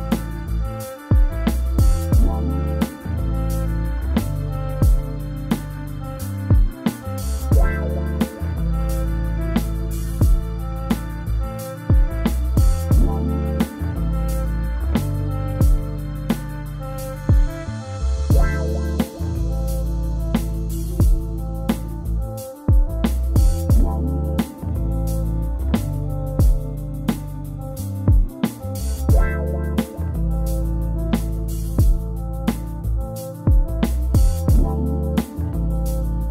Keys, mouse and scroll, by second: 0.5-5.0 scroll up 1, 5.0-5.8 scroll up 1, 5.8-9.2 scroll up 1, 9.2-9.8 scroll up 1, 9.8-12.0 scroll up 1, 12.0 click, 12.5 k, 36.2-36.3 scroll down 5.